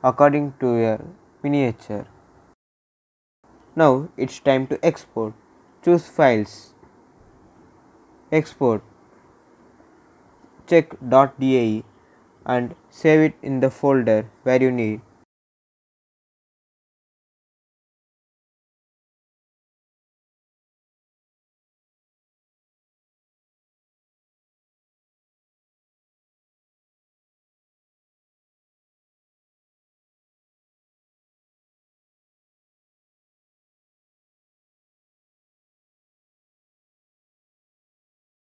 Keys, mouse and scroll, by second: 3.9 click, 8.4 click, 12.3 click, 16.9 click, 17.9 scroll down 1, 19.0 click, 22.4 click, 26.3 click, 29.9-30.5 typing, 32.5 space, 32.8 d, 34.4 Return.